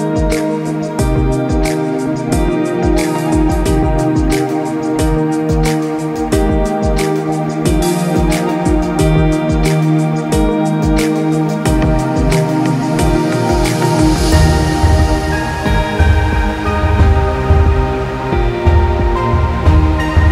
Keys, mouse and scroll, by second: 0.7 shift+d, 2.8 middle click, 4.1 shift+d, 8.3 g, 10.0 middle click, 12.0 scroll up 4, 12.2 middle click, 15.1 shift+d, 17.9 middle click, 19.3 middle click, 19.7 g.